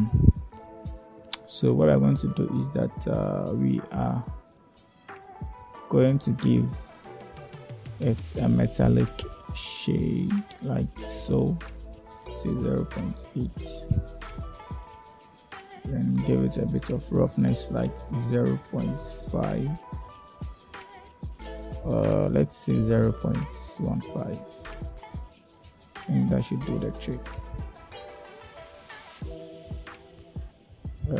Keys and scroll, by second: 11.3 0, 11.6 ., 12.1 8, 12.4 Return, 17.2 0, 17.6 ., 18.3 5, 18.9 Return, 21.7 0, 21.9 ., 22.8 1, 23.2 Return.